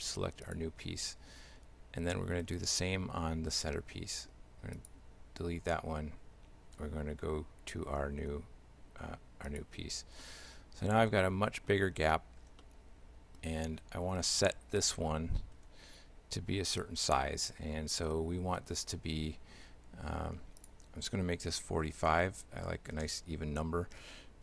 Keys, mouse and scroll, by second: 2.5 right click, 4.8 click, 6.8 e, 10.2 shift+middle click, 12.6 shift+middle click, 14.2 right click, 15.7 s, 20.6 click.